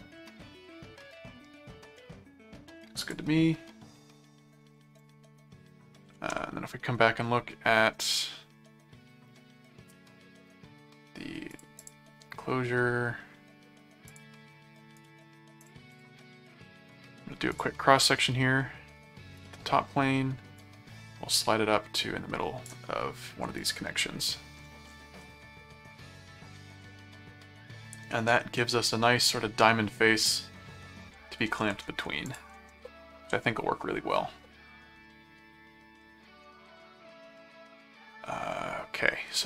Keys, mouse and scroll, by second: 1.1 middle click, 3.0 click, 5.0 ctrl+click, 6.2 ctrl+Tab, 8.1-9.5 middle drag, 11.5 click, 14.1 click, 15.0 right click, 15.6 click, 17.5 click, 19.4 click, 20.6-22.6 drag, 23.6 click, 25.2-29.4 middle drag, 32.3 ctrl+click, 32.5 ctrl+Tab, 35.0 middle click, 36.8-39.1 middle drag.